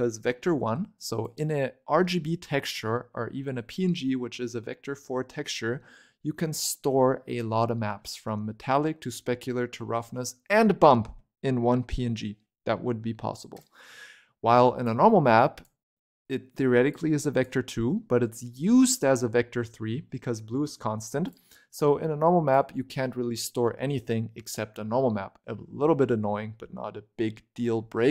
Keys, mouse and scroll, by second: 0.9 click, 6.4-7.0 scroll down 1, 7.0-10.0 middle drag, 14.7 click, 16.8 click, 17.8-20.8 middle drag, 21.2 click, 22.4 click.